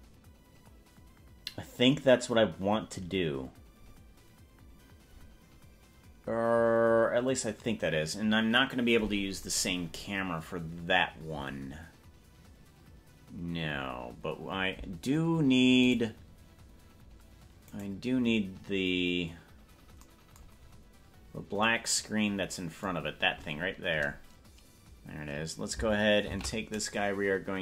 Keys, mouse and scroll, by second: 16.2 right click, 17.8 right click, 20.6 scroll down 2, 20.8-21.6 scroll down 5, 23.2 scroll down 1, 26.4 shift+d.